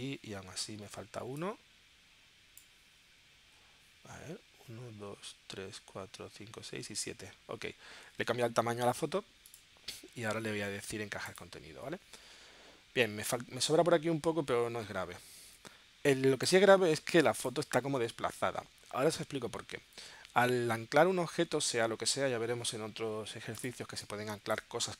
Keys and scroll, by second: 23.8 space.